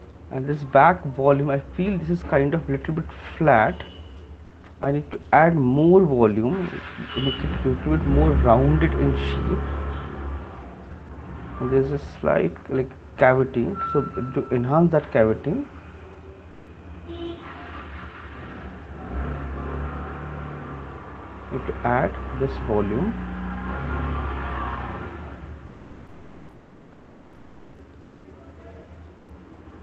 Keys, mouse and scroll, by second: 1.0 right click, 1.5 click, 4.8 right click, 6.9 [, 7.1 [, 9.9 ], 11.1 ], 12.6 alt+click, 13.0 ctrl+z, 14.8 click, 15.4 click, 15.9 click, 18.2 click, 18.9 ], 19.1 ], 19.9 click, 20.3 click, 22.4 click, 22.4 right click, 23.0 click, 23.4 click, 23.9 click, 25.9 click, 26.3 click, 26.9 click, 27.3 click.